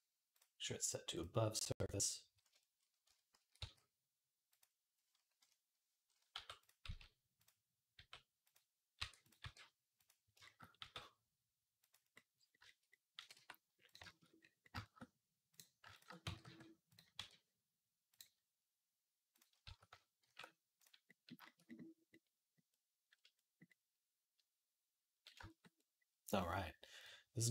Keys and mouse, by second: 2.9 Tab, 3.2 a, 3.4 s, 4.4-19.5 right drag, 5.2 KP_1, 6.1 g, 6.6 s, 7.8 g, 8.8 e, 9.2 r, 10.6 g, 13.0 g, 16.1 g, 16.9 q, 19.5 a, 20.0 shift+n, 22.4-27.5 right drag, 26.8 click, 26.8 middle click.